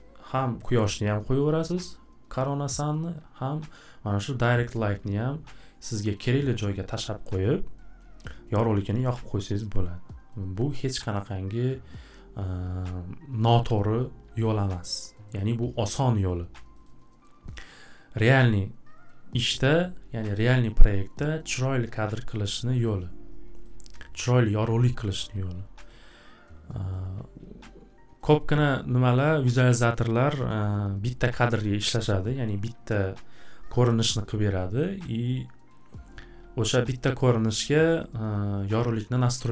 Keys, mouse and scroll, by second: 10.7 click, 11.3 click, 14.8 click, 15.4 click, 16.8 click, 23.6 click, 24.0 click, 25.9 click, 26.1 click.